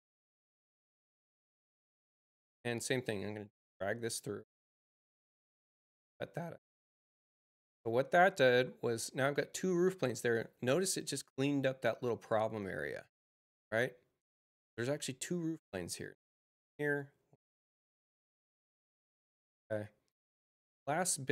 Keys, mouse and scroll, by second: 0.7 click, 2.7-4.8 drag, 7.2 click, 15.5 click, 16.7 click.